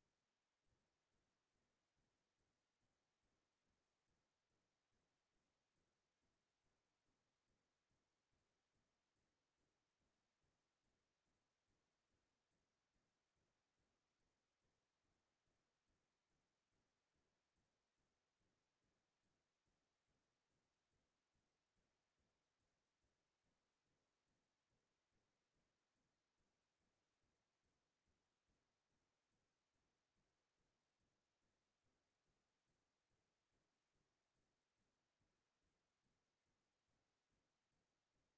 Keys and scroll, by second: 1.8 ctrl+a, 2.8 Delete, 6.3 ctrl+c, 10.1 ctrl+v, 19.0 Down, 19.4 Down, 19.9 Down, 20.3-20.6 Down, 27.1 space.